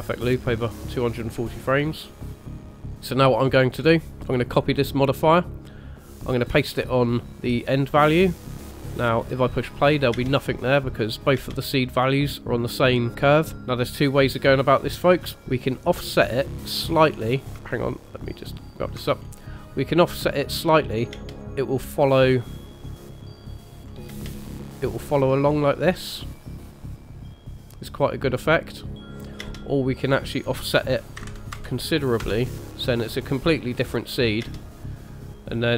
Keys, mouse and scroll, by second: 2.9 click, 2.9-3.8 scroll up 2, 3.8-4.1 scroll up 2, 4.4 click, 6.0 click, 8.4 click, 10.1 space, 11.3 space, 13.6 click, 15.4 click, 17.5 scroll down 4, 17.6 ctrl+middle click, 19.2-19.6 scroll up 2, 19.6 middle click, 21.1 space, 21.4 space, 22.1 click, 24.1 space, 29.4 space, 30.2 click, 31.5 KP_0, 34.4 space.